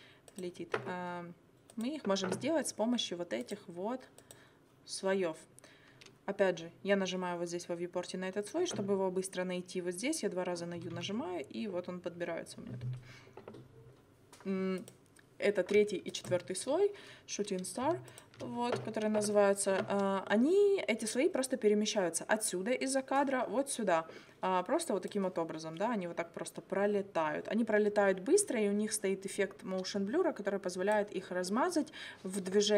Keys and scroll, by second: 10.8 u.